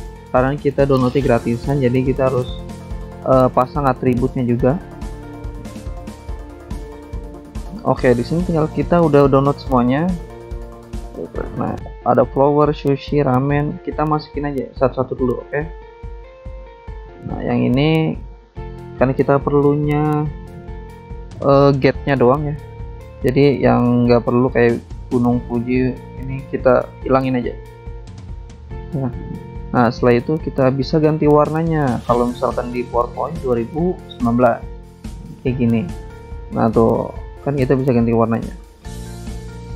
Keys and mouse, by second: 0.0 click, 0.1 click, 0.1 double click, 0.6 click, 0.7 click, 0.8 click, 0.9 double click, 1.6 double click, 1.7 double click, 2.3 double click, 2.4 double click, 2.5 click, 2.6 click, 2.7 click, 2.8 double click, 3.3 click, 3.3 click, 3.8 click, 3.9 double click, 4.9 double click, 5.0 double click, 5.8 click, 6.0 click, 6.7 alt+Tab, 7.5 click, 8.0 alt+Tab, 8.5 alt+click, 9.1 click, 10.2 alt+Tab, 10.9 alt+click, 11.7 click, 11.8 right click, 13.1 click, 14.0 click, 15.0 click, 15.1 click, 15.5 click, 15.6 double click, 16.2 double click, 16.4 double click, 16.7 double click, 16.8 double click, 17.8 double click, 17.9 double click, 18.7 click, 19.0 alt+Tab, 21.4 click, 23.5 click, 23.6 click, 26.7 click, 27.5 click, 28.7 click, 29.3 ctrl+click, 29.9 click, 30.7 ctrl+click, 31.2 ctrl+click, 31.9 BackSpace, 32.4 click, 33.1 click, 34.6 click, 34.7 click, 35.4 ctrl+click, 35.5 click, 35.8 ctrl+click, 35.8 ctrl+click, 36.5 ctrl+click, 36.6 ctrl+click, 38.5 click.